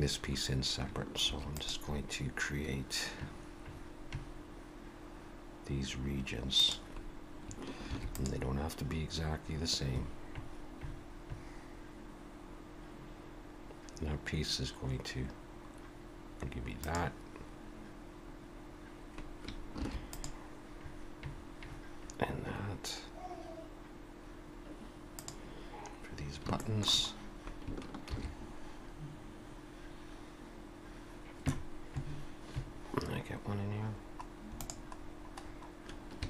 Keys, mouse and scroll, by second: 1.3 ctrl+r, 7.9 ctrl+r, 19.8 ctrl+r, 26.2 scroll down 1, 26.6 shift+middle click, 27.1-27.7 scroll up 1, 28.1 ctrl+r.